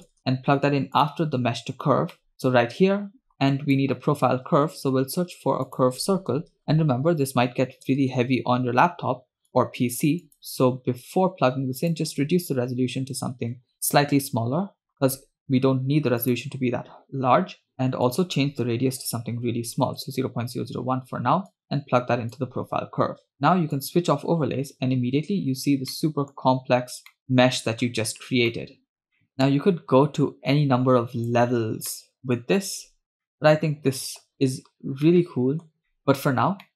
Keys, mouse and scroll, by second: 1.5-2.1 scroll up 2, 2.3 middle click, 2.3-2.9 scroll up 1, 3.6 drag, 4.8 shift+a, 10.9-11.2 scroll up 3, 11.9-14.3 drag, 16.4-17.7 drag, 18.2-20.1 drag, 19.5 0, 21.6-22.6 drag, 23.9 click, 24.7-25.3 scroll down 1, 25.3-25.8 scroll down 1, 25.8 scroll up 4, 26.0 middle click, 26.4-27.1 scroll down 2, 27.2-28.0 middle drag, 28.2-29.0 scroll down 2, 28.7-29.0 middle drag, 29.0 scroll up 2, 29.3-29.7 middle drag, 30.4-30.8 scroll down 1, 32.1 middle click, 33.3-34.6 middle drag, 35.1-35.8 middle drag, 35.8 scroll down 1, 36.0 middle click.